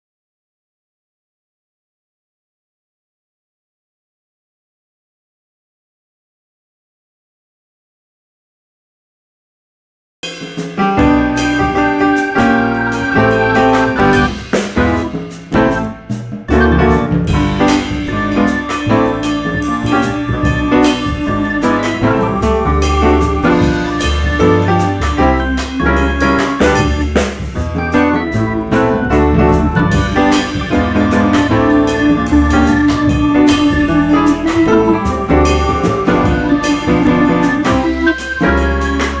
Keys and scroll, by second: 0.8 ctrl+r, 2.7 ctrl+r, 2.8 ctrl+c, 6.2 1, 6.4 F4, 7.8 F3, 13.7 alt+c, 20.0 ctrl+shift+e, 22.2 2, 26.4 2, 27.8 ctrl+z, 31.1 1, 37.5 2, 38.4 ctrl+r, 39.0 ctrl+c.